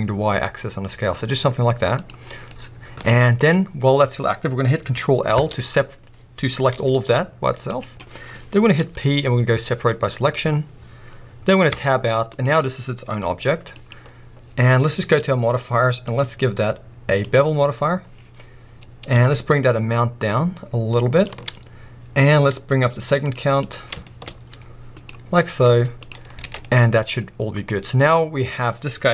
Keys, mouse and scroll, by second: 2.1 click, 2.3 middle click, 2.3 scroll down 2, 3.2-5.4 scroll up 2, 5.4 ctrl+l, 7.8 right click, 7.9 middle click, 8.4-8.8 scroll up 2, 11.7 Tab, 12.3-12.7 drag, 12.7-13.2 scroll down 1, 13.2 g, 13.9 right click, 15.5 click, 16.0-24.1 drag, 17.8-18.8 scroll up 1, 24.1-26.2 shift+middle drag, 24.3 scroll up 1, 24.5 z, 26.2 scroll down 2, 26.4 alt+a, 28.4-29.1 drag.